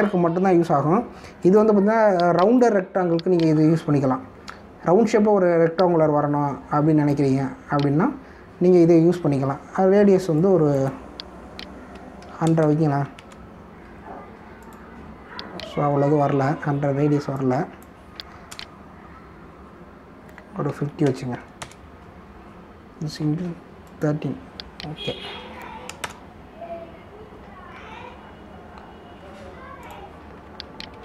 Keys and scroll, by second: 1.2 ctrl+d, 13.1 1, 13.4 0, 14.1 Return, 19.5 BackSpace, 21.7 5, 22.0 0, 22.6 Return, 27.0 ctrl+Return, 28.7 ctrl+s.